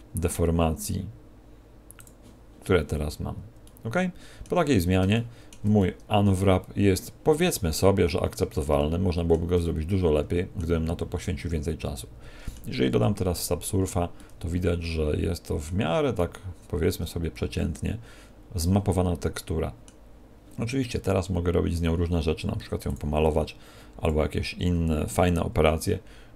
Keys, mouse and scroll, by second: 1.9 click, 3.6 middle click, 4.6-5.3 scroll down 3, 5.1 shift+middle click, 5.7 middle click, 8.0 Tab, 8.7 shift+middle click, 9.5 middle click, 11.1 middle click, 13.3 ctrl+2, 14.1 middle click, 16.0 middle click, 24.0 click.